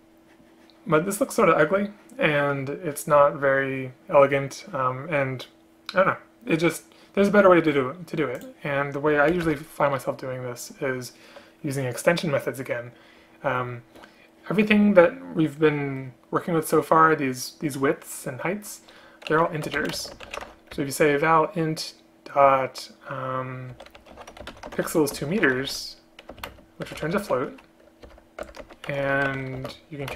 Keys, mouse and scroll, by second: 9.4 Return, 9.5 Return, 20.0 space, 26.6 shift+space, 28.1 Return, 28.5 Return, 28.7 Tab, 29.6 shift+space.